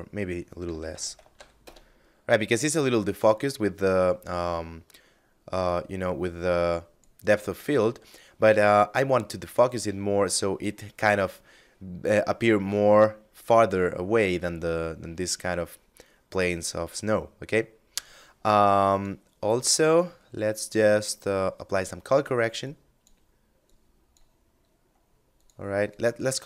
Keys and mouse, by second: 0.1 0, 0.2 Tab, 0.3 1, 0.5 0, 0.7 Return, 4.7 click, 17.2 click, 21.0 click, 26.1 shift+a.